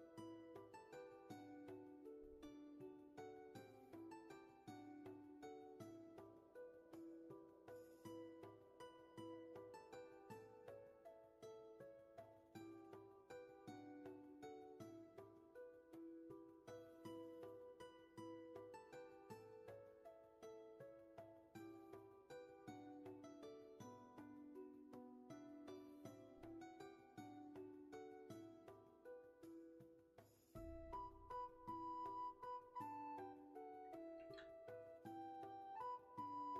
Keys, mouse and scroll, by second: 1.1 shift+space, 3.4 space, 4.5 ctrl+z, 5.7 shift+space, 7.1 ctrl+z, 7.7 space, 10.6 scroll up 1, 10.7 ctrl+shift+z, 12.3-13.8 scroll down 1, 16.4 ctrl+z, 17.2 shift+space, 21.1 ctrl+z.